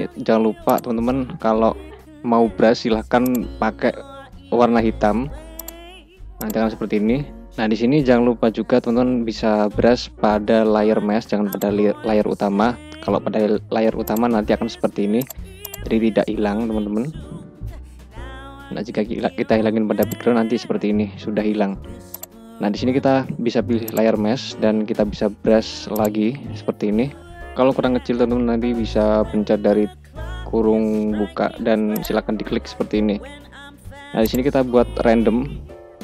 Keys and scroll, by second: 7.4 ctrl+z, 17.4 ctrl+alt+z, 29.5 [, 35.8 ].